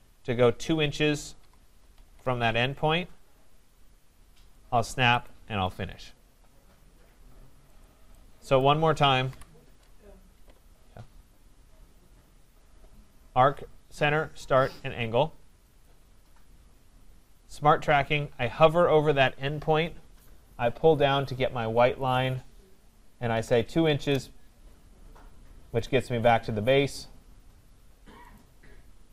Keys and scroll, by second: 2.1 Return, 9.3 Delete, 23.9 Return.